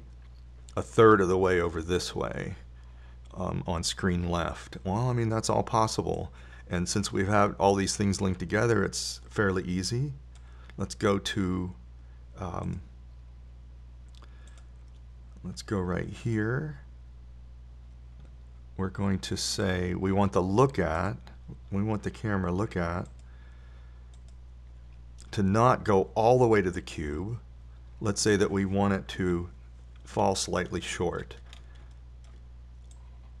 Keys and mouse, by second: 7.6-9.6 drag, 14.1 click, 22.4-24.7 drag, 27.4-27.8 drag, 27.8 middle click, 30.6 KP_7.